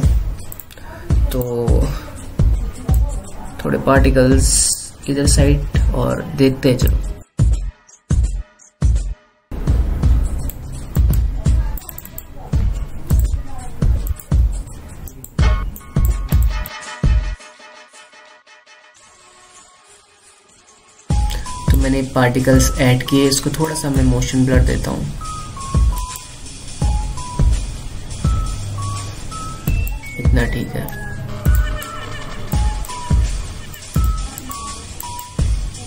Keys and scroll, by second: 7.7 BackSpace, 19.1 ctrl+u.